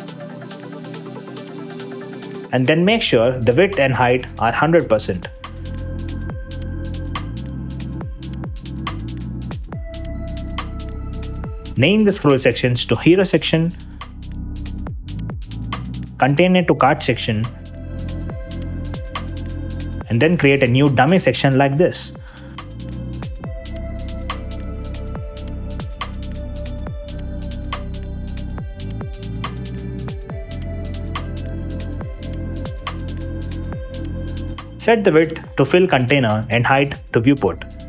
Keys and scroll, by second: 3.3 shift+Return, 5.3 0, 5.8 Return, 8.2 0, 8.8 Return, 10.3 super+z, 13.7 space, 14.6 n, 14.7 Return, 18.0 s, 18.4 space, 18.8 s, 18.8 BackSpace, 20.8-22.4 typing, 24.2 w, 24.3 space, 24.7 n, 24.8 Escape, 26.2 Return, 31.1 super+x, 32.0 super+v.